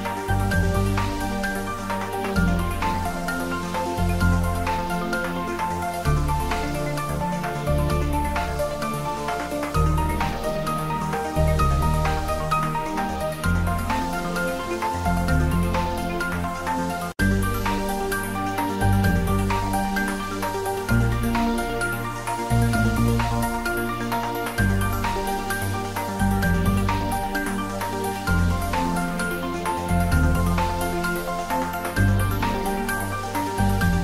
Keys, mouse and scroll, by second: 0.7 click, 1.4 shift+middle click, 1.9 ctrl+middle click, 2.4 ctrl+middle click, 3.7-4.9 shift+middle drag, 5.0 shift+right click, 5.3 shift+a, 5.9 click, 6.5-7.7 typing, 8.7 click, 9.0 middle click, 10.0-13.2 typing, 10.5 click, 11.6 click, 12.5 click, 13.1 click, 13.3 ctrl+middle click, 13.8 shift+middle click, 14.7 middle click, 15.0 Tab, 15.9 3, 16.3 click, 17.2 i, 18.6 click, 18.8 middle click, 19.5 middle click, 20.2 shift+click, 21.3 ctrl+z, 21.7 middle click, 22.2 shift+middle click, 23.0 shift+click, 23.6 i, 24.4 click, 24.8 ctrl+middle click, 25.2 middle click, 25.8 Tab, 26.4 click, 26.6 Tab, 27.2 ctrl+3, 27.8 Tab, 28.1 middle click, 28.9 click, 29.1 middle click, 29.8 shift+click, 30.3 s, 31.4 click, 32.8 ctrl+z, 33.1 click, 33.7 ctrl+z.